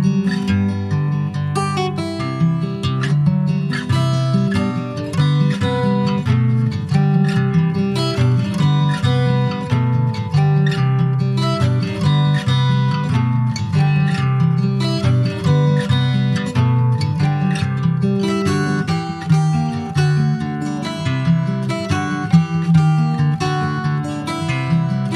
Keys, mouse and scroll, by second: 0.8 Tab, 0.9 click, 1.1 scroll down 4, 1.4 middle click, 2.1 scroll down 4, 2.4 middle click, 2.7 ctrl+s, 2.9 click, 3.1 scroll down 1, 3.3 shift+middle click, 4.1 ctrl+s, 4.2 ctrl+click, 4.3 scroll up 2, 4.6 shift+middle click, 4.9 click, 6.1 ctrl+s, 6.3 click, 6.7 scroll up 1, 6.9 Tab, 7.4 middle click, 7.5 scroll up 2, 7.8 shift+middle click, 8.6 ctrl+r, 10.2 ctrl+r, 13.2-14.4 shift+middle drag, 14.4 ctrl+s, 14.4-14.7 scroll down 2, 14.7 middle click, 15.1-15.4 scroll up 4, 15.4 shift+middle click, 16.1 ctrl+b, 20.4 middle click, 20.6-21.0 scroll up 2, 21.1 ctrl+s, 21.3 Tab, 21.9 Tab, 22.8 shift+d, 23.7 middle click, 24.2 e, 24.8 alt+s.